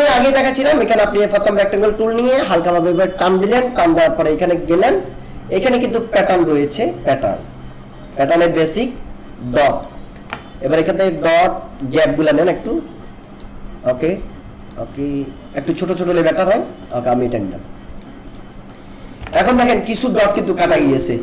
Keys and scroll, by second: 19.3 ctrl+=, 20.3 alt+space.